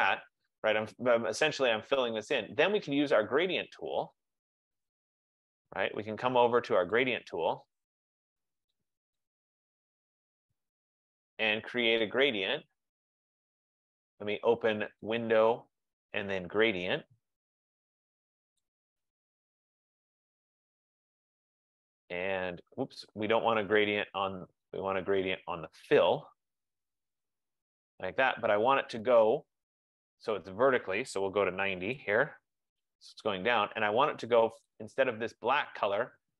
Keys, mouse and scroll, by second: 0.0 click, 2.1 click, 4.9 click, 7.1 click, 9.2 click, 10.3 click, 15.3 click, 18.7 click, 20.3 F15, 20.9 click, 24.8 click, 27.5 click, 31.0 click, 31.2-32.1 typing, 34.8 click, 35.0 click.